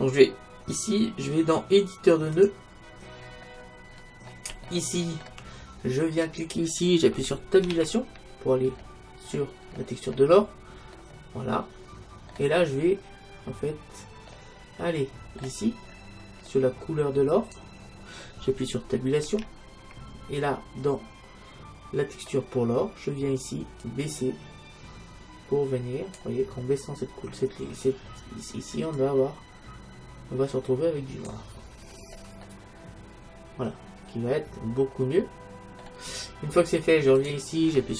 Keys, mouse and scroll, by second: 3.5-6.4 middle drag, 6.4-8.0 drag, 7.9 Tab, 9.2-17.4 middle drag, 17.4-19.2 drag, 19.5 Tab, 24.0-25.7 drag, 29.0-30.8 drag, 31.8 middle click, 33.6 middle click, 37.3-37.9 drag.